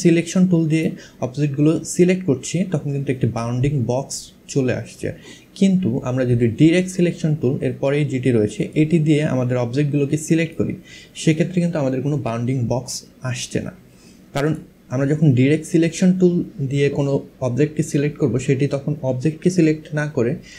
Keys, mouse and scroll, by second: 1.6 click, 8.2 click, 10.0 click, 13.0 click.